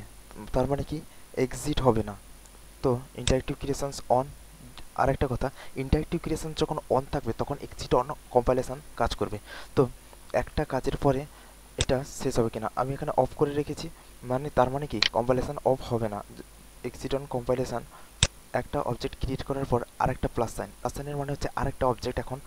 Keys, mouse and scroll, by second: 11.3 alt+middle click, 11.7 alt+click, 12.2 alt+middle click, 14.5 alt+middle click, 15.0 alt+right click, 15.7 alt+middle click, 18.3 click, 19.0 alt+middle click.